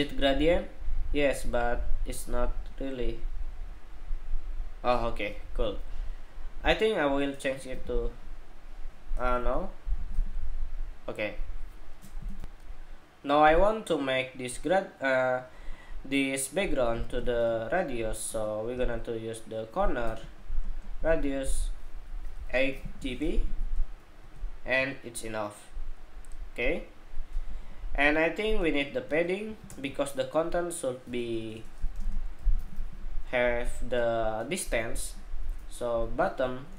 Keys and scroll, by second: 12.1 shift+super+2.